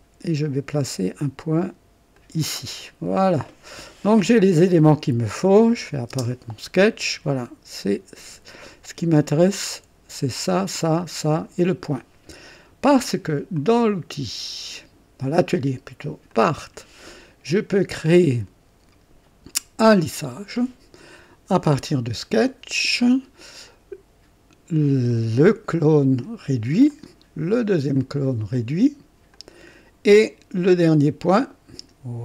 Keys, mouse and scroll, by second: 2.1 click, 5.7 click, 6.1 space, 8.6-9.5 drag, 9.7 click, 13.5 click, 16.4 click, 19.9 click, 21.8 click, 23.0 click, 25.1 click, 26.9 click, 28.0 click, 29.3 click, 30.9 click.